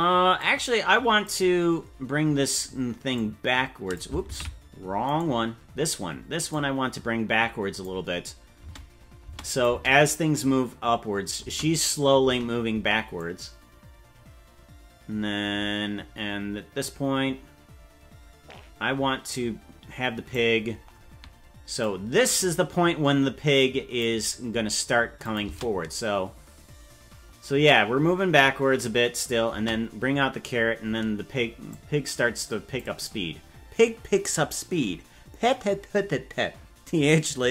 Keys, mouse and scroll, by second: 0.4 click, 3.1 click, 4.5 ctrl+z, 5.1 right click, 6.5-7.8 drag, 8.7 space, 9.3 space, 9.5 click, 9.7 space, 11.5 space, 12.3 space, 12.7 space, 13.2-20.3 drag, 21.8-24.0 drag, 25.2 click, 25.6 space, 29.6 space, 31.7-32.8 drag.